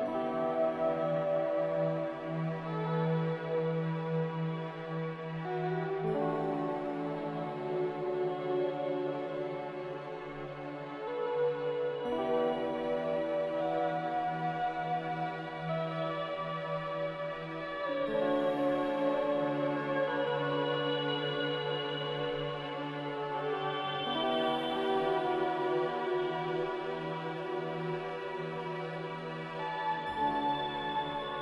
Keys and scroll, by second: 6.8 z, 8.8 Delete, 12.9 Delete.